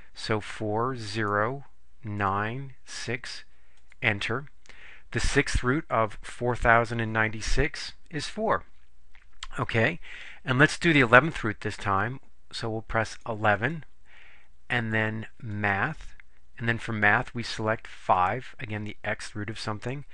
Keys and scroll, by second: 0.4 4, 1.3 0, 2.3 9, 2.9 6, 3.9 Return, 13.2 1, 13.7 1, 18.3 5.